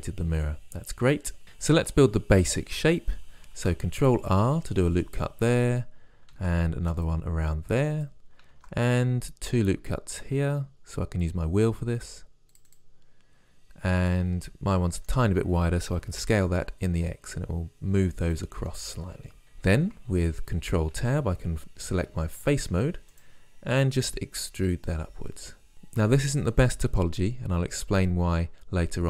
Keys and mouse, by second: 3.6 ctrl+r, 6.4 ctrl+r, 8.6 ctrl+r, 14.2-15.8 drag, 16.1 s, 21.0 ctrl+Tab, 24.5 e.